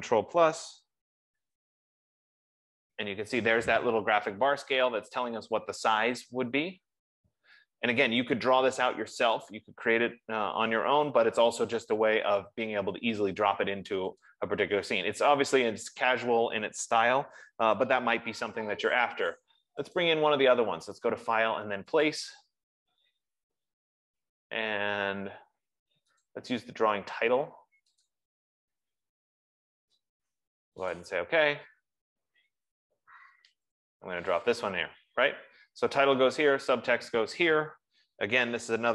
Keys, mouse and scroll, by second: 1.0 ctrl+=, 1.7 ctrl+=, 2.7 ctrl+=, 14.8 click, 20.5 click, 22.5 click, 26.6 click, 28.4 click, 30.8 F15, 31.2 click, 34.2 click.